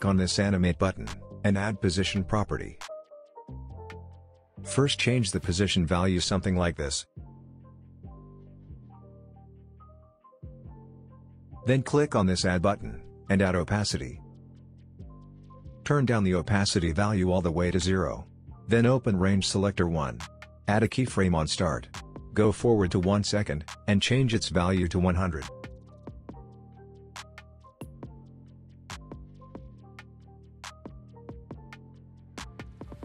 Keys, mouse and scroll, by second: 4.1-5.8 scroll up 1, 5.8-9.2 drag, 14.4 click, 17.0-18.9 drag, 25.0 space, 26.6-33.0 drag.